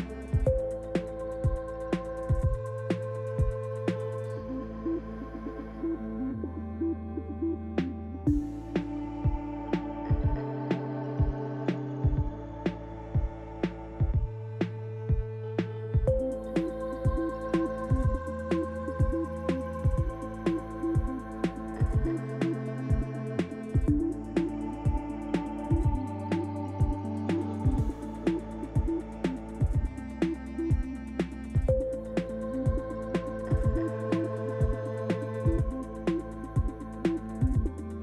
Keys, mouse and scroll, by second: 0.1 click, 0.3 click, 0.9 click, 1.0 click, 6.0 click, 6.8 Tab, 8.1 click, 15.0 click, 15.8 Tab, 16.4 click, 17.9 shift+click, 18.7 click, 19.6 click, 21.0 click, 21.9 click, 25.3 click, 25.9 Tab, 26.5 middle click, 27.9 Tab, 28.6 click, 29.8 shift+middle click, 30.6 middle click, 32.1 shift+click, 33.7 click, 34.5 click, 34.6 shift+click, 35.1 Tab, 35.5 middle click, 37.0 shift+middle click.